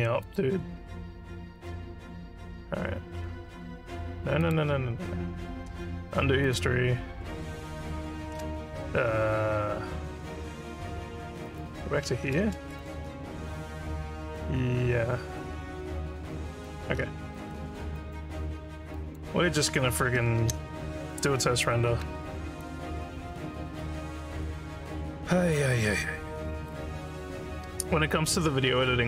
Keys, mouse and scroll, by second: 0.3 click, 4.4 click, 6.4 click, 11.4 click, 12.8-16.7 alt+drag, 17.1 scroll down 1, 17.4 alt+middle click, 18.0 alt+click, 19.0 alt+click, 20.4 ctrl+s.